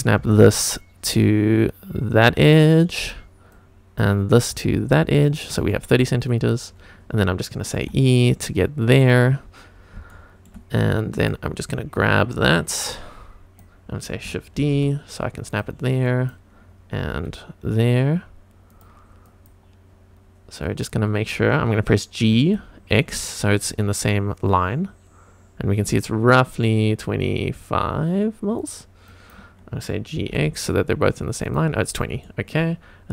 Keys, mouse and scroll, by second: 0.2 scroll up 1, 0.2 g, 3.0 click, 3.5 click, 4.5 g, 5.3 click, 5.7 shift+middle click, 6.3 click, 6.7-7.5 scroll up 1, 7.8 e, 9.0 click, 9.3 scroll down 1, 9.8 scroll up 2, 10.1 shift+middle click, 11.2 click, 12.7 click, 14.6 shift+d, 15.5 click, 16.1 click, 17.1 g, 18.7 click, 19.2 click, 20.6 click, 22.3 g, 22.9 x, 28.6 click, 29.1 click, 30.2 g, 30.3 x, 31.4 click, 32.2 shift+middle click, 32.8-33.1 scroll up 1.